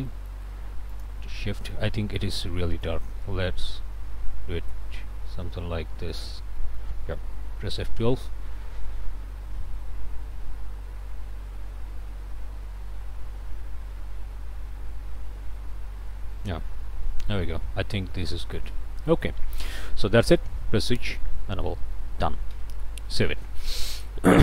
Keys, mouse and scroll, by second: 0.1 middle click, 0.9 ctrl+shift+click, 1.5-2.8 ctrl+shift+drag, 2.8-6.4 middle drag, 6.4 click, 6.6 middle click, 7.0-11.0 drag, 7.7 F12, 16.3 middle click, 16.7 click, 16.8-17.3 scroll up 1, 17.3 click, 17.8 scroll down 1, 18.2 click, 19.1 shift+click, 20.9 click, 21.5 click, 22.5 ctrl+s.